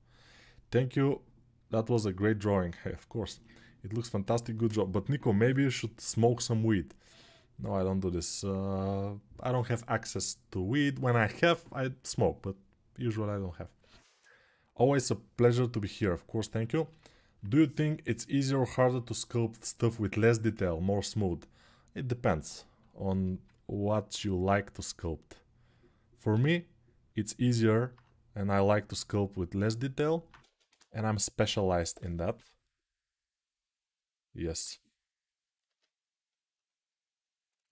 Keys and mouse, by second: 26.1 g, 30.2 ctrl+Tab, 30.5 shift+a, 35.4 Tab.